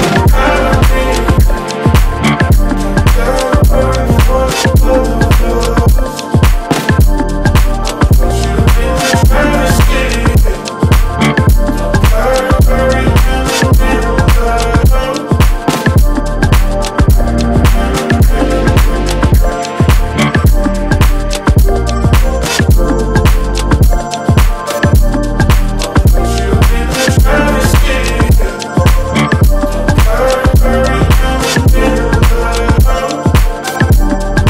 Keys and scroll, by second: 3.6 ctrl+g, 4.9 Up, 5.9 Down, 6.6 space, 7.8 Up, 9.0-14.3 typing, 12.4 Return, 14.7 Escape, 17.6 ctrl+alt+c, 18.5 ctrl+alt+v, 21.2 Up, 22.2 Up, 22.5 Escape, 23.2 Up, 25.8 Escape, 31.4 Up, 32.3 Up, 33.2 ctrl+space.